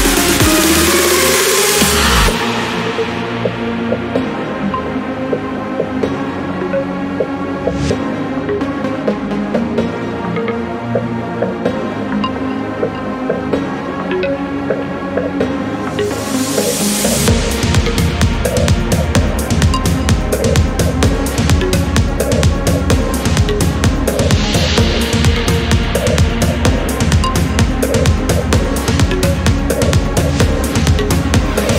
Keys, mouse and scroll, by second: 0.2 1, 0.8 click, 1.3 1, 1.8 click, 2.9 4, 7.0 click, 8.0 click, 9.1 2, 9.6 0, 11.9 click, 13.0 click, 14.2 click, 15.8 Escape, 16.8 click, 17.3 click, 18.8 click, 23.5 click, 24.7 4, 25.2 click, 26.2 1, 26.7 click, 27.2 1, 28.2 click, 29.6 click, 30.6 2, 31.0 0.